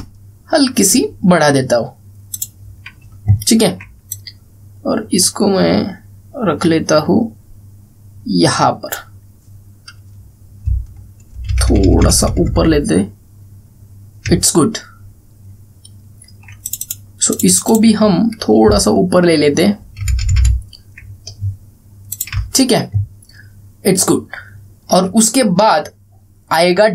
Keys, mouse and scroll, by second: 3.0 click, 4.0 alt+scroll up 1, 4.8-9.8 drag, 11.4 Up, 15.2 alt+scroll down 1, 16.2 alt+scroll up 1, 17.4 click, 19.4 alt+Up, 22.8 click, 23.2 alt+scroll down 1, 24.4 alt+scroll up 1, 24.7 alt+scroll down 1.